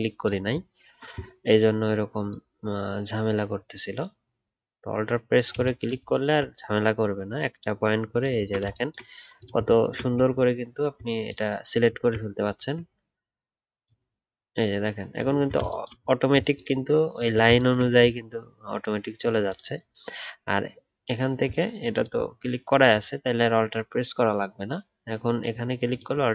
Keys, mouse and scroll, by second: 6.1-6.8 alt+scroll up 1, 8.3 alt+scroll up 1, 8.4 alt+scroll down 1, 10.2 alt+scroll up 2, 11.9 alt+scroll down 1, 12.5 alt+scroll up 1, 15.3 alt+scroll down 1, 17.1 alt+scroll up 1, 21.9 ctrl+click, 25.9 alt+click.